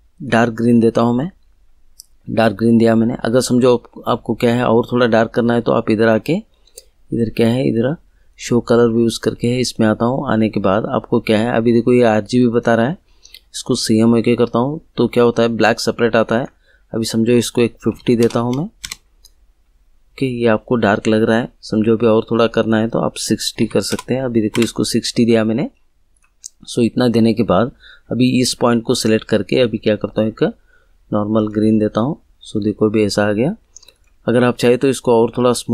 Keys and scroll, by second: 17.9 5, 18.2 0, 18.8 Return, 23.5 6, 23.9 0, 24.5 Return.